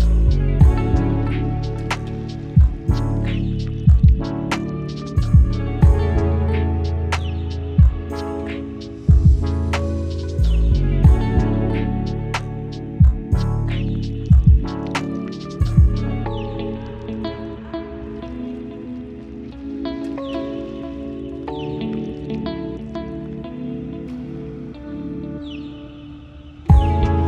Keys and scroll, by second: 11.5 ctrl+t, 13.7 Right, 13.8 Right, 13.9 Right, 13.9 Right, 17.1 ctrl+t, 25.6 ctrl+shift+e.